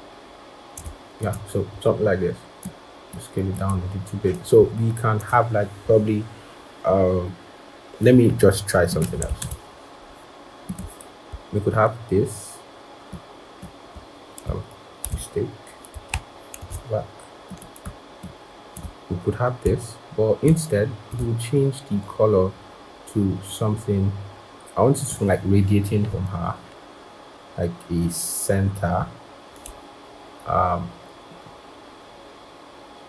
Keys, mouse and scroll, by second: 9.3 ctrl+-, 11.2 ctrl+-, 13.0 alt+click, 14.9 ctrl+z, 16.5 ctrl+shift+z, 18.1 alt+click, 20.3 shift+click.